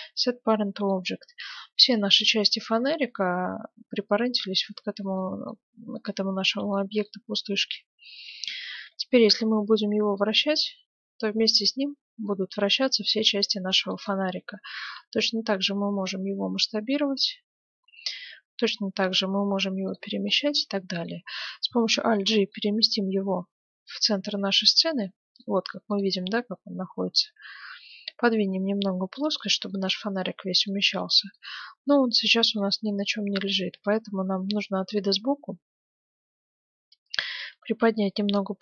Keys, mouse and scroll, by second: 0.2-2.0 middle drag, 4.6-5.1 scroll down 1, 5.1-8.4 middle drag, 5.9-7.5 right drag, 8.6 middle click, 9.2 r, 10.1 middle click, 14.6 s, 19.0 g, 20.3-22.2 middle drag, 22.1 alt+g, 22.6-24.4 middle drag, 25.0-26.7 middle drag, 25.9-27.8 right drag, 27.2-29.1 drag, 29.7-31.5 middle drag, 31.5-32.8 right drag, 31.9-33.7 middle drag, 34.3 KP_3, 35.4-37.3 middle drag, 37.3 g.